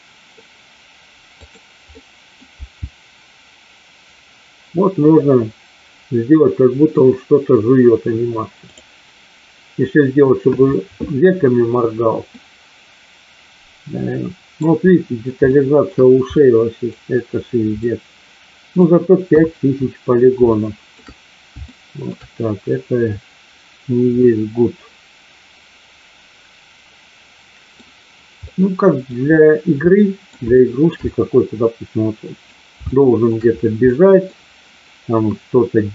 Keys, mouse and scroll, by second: 1.3 click, 1.9 middle click, 2.7 g, 12.3-14.5 middle drag, 15.5 shift+middle click, 16.3-16.9 middle drag, 17.8-18.8 middle drag, 19.3 KP_1, 20.4-21.0 shift+middle drag, 21.7-22.2 shift+middle drag, 24.2-27.7 middle drag, 28.4 middle click, 29.8 middle click, 30.5 shift+middle drag, 30.9-32.3 middle drag, 32.8-33.2 shift+middle drag, 33.8-34.2 middle drag.